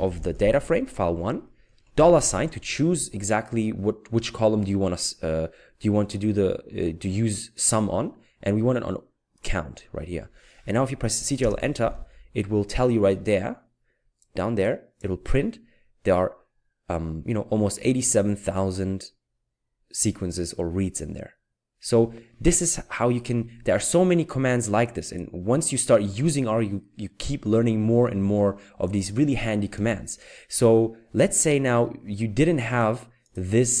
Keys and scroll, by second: 0.0-2.0 typing, 11.5 ctrl+Return.